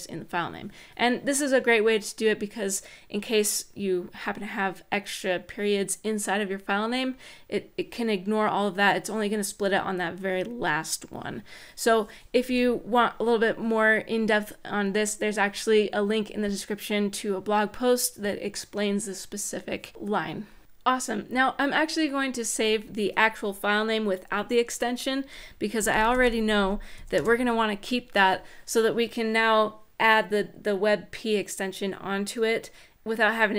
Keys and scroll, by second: 12.2 Right, 25.3-27.2 typing.